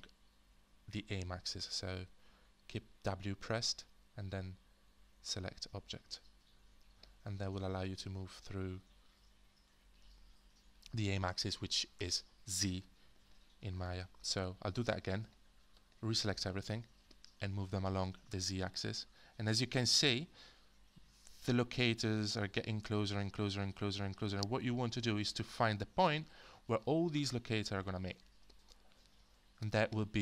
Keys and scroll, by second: 1.9-6.8 typing.